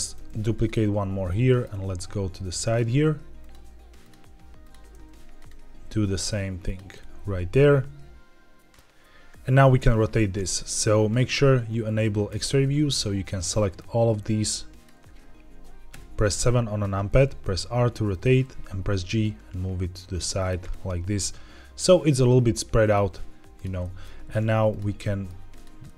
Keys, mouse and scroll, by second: 0.1 shift+d, 0.4 right click, 1.2 middle click, 1.6 e, 2.5 click, 2.8 e, 3.3 click, 3.5 e, 3.9 click, 4.8 shift+d, 5.3 right click, 5.6 e, 6.6 click, 6.8-8.7 middle drag, 12.2 click, 13.7-14.7 drag, 15.8 KP_7, 17.2 r, 18.0 click, 18.2 g, 20.3 click, 20.6-22.8 middle drag, 23.5 click, 23.7 middle click, 24.1 g, 24.6 click, 24.9 middle click, 25.4 click, 25.7 middle click.